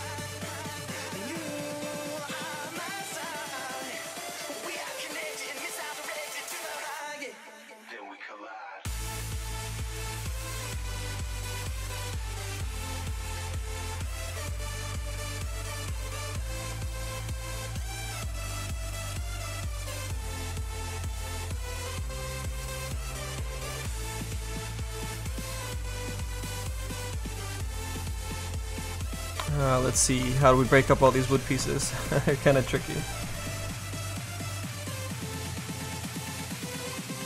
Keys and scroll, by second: 4.0 z, 6.2 z, 8.7 z, 10.4 z.